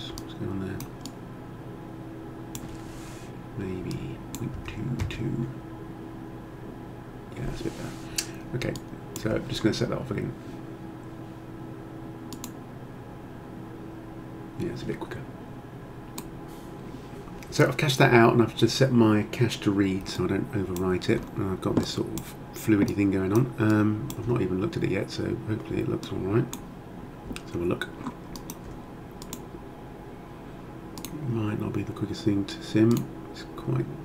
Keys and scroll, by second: 4.6 2, 5.0 Return.